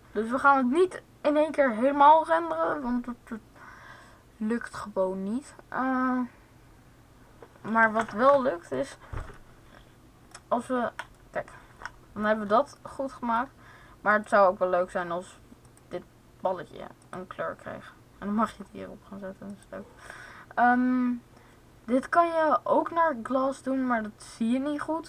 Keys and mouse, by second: 13.9-19.2 drag, 15.6 right click, 19.3-21.1 drag.